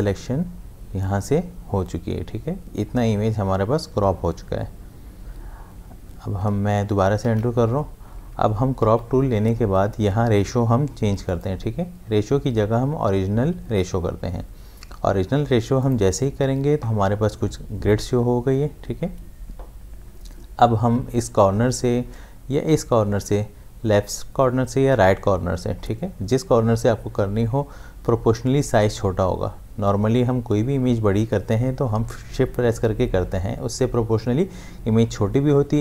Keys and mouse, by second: 6.5 click, 7.2 ctrl+z, 8.8 c, 11.3 click, 15.8 click.